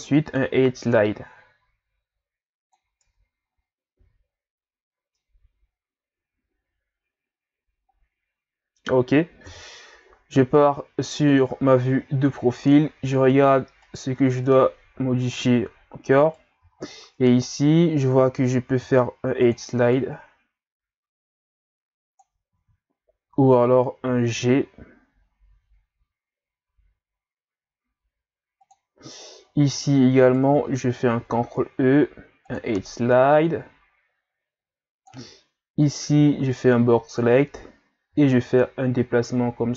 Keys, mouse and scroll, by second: 1.0 click, 1.8 click, 2.1 middle click, 2.8 middle click, 3.0 Tab, 3.1 middle click, 3.5 scroll down 3, 4.0 a, 4.3-5.2 scroll down 2, 5.2-8.2 middle drag, 9.4 KP_3, 11.7 ctrl+scroll down 3, 12.1-12.7 scroll up 4, 13.1-13.8 ctrl+scroll up 3, 13.8 right click, 14.1 Tab, 15.1 z, 16.3 right click, 16.6 b, 18.8 ctrl+e, 22.5 ctrl+z, 24.0 g, 29.3-30.0 shift+scroll down 3, 30.2 alt+right click, 31.2 ctrl+e, 35.8 right click, 36.2 b, 38.1 g.